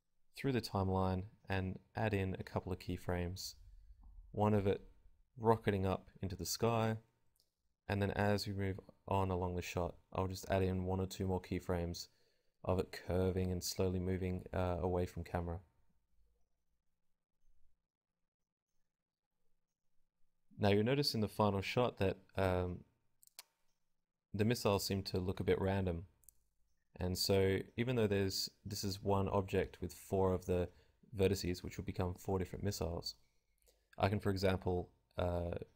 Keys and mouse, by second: 0.0 k, 0.0 v, 0.8 click, 2.4 click, 2.9 g, 3.5-4.8 drag, 3.9-6.3 typing, 7.7 click, 10.5 g, 11.1 click, 11.2 i, 12.4 click, 12.9 ctrl+z, 13.1 ctrl+z, 13.1 click, 14.0-15.1 drag, 14.2-15.1 typing, 17.4 g, 17.8 click, 18.0 i, 19.9-22.9 typing, 20.3-21.3 drag, 21.9 click, 26.1 i, 26.7 click, 28.6 s, 29.4 click, 29.4 i, 30.3 g, 31.1 i, 32.7-34.4 typing.